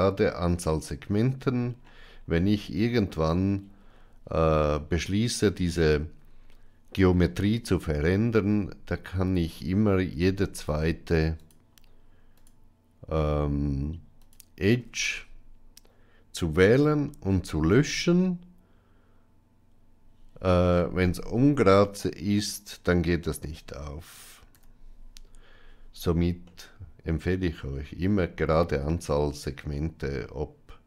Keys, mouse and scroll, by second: 11.3 alt+shift+click, 12.2 alt+shift+click, 14.1 alt+shift+click, 17.2 ctrl+x, 24.7 ctrl+z, 26.4-27.6 middle drag, 28.3 shift+middle click, 29.7-30.8 middle drag.